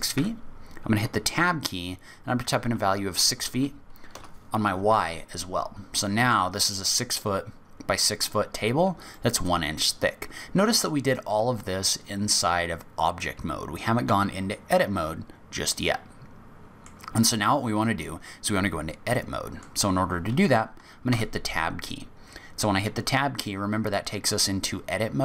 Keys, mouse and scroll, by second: 5.3-6.0 scroll down 5, 6.0 middle click, 9.1 scroll down 1, 9.1 middle click, 10.1-10.9 scroll up 3, 15.8 middle click, 18.4 middle click, 21.1 Tab.